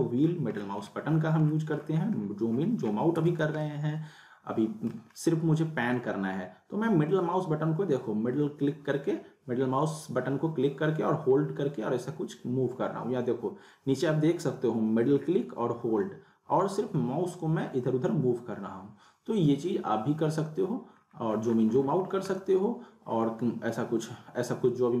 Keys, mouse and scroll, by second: 0.3 scroll down 1, 0.8 scroll down 1, 2.1 scroll up 1, 3.1 z, 3.5 alt+scroll up 1, 3.6-5.1 alt+middle drag, 5.1 scroll down 2, 5.9-20.3 middle drag, 20.6-21.0 scroll down 1, 21.0 scroll, 21.5 scroll, 21.7 scroll down 1, 21.9-22.2 scroll up 1, 22.4-25.0 alt+middle drag.